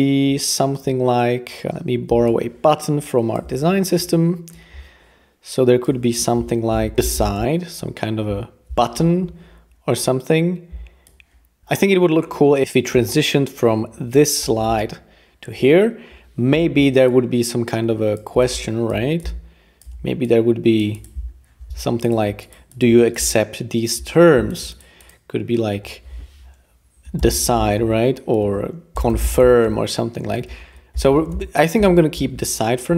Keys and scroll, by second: 6.7-7.9 typing, 11.6 Return, 16.5 r, 27.0-32.3 typing, 28.4 super+a, 30.5 super+a.